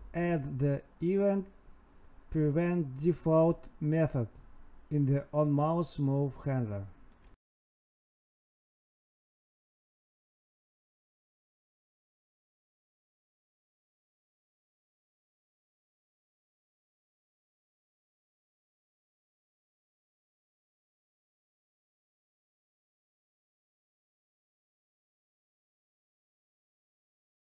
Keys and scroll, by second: 1.6 Tab, 3.6 Right, 3.7 space, 4.1 space, 5.2 Tab, 7.2 Tab, 8.2 Left, 8.9 Left, 9.5 End, 9.7 Left, 14.4 Escape, 14.5 Right, 14.7 space, 16.0 Tab, 17.2 Down, 17.3 Tab, 18.3 Escape, 18.4 Right, 18.5 Escape, 18.7 Right, 22.4 Right, 23.0 Left, 23.1 Right, 23.2 space, 24.5 Tab, 26.5 Down, 26.7 Tab.